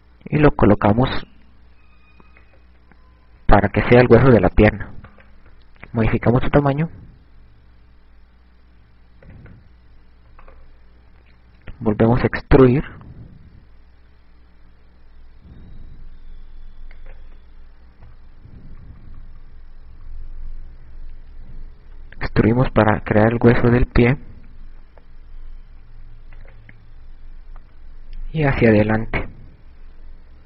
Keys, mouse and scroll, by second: 3.3 click, 5.3 right click, 7.2 click, 10.9 right click, 11.0 e, 17.5 click, 18.2 KP_6, 19.3-20.6 typing, 22.5 e, 27.3 click, 27.9 e.